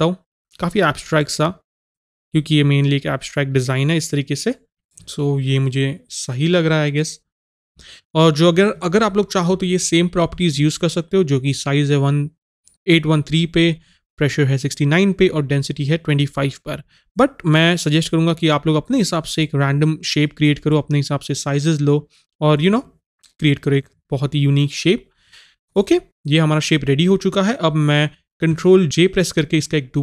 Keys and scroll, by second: 4.7 ctrl+z, 28.9 ctrl+j.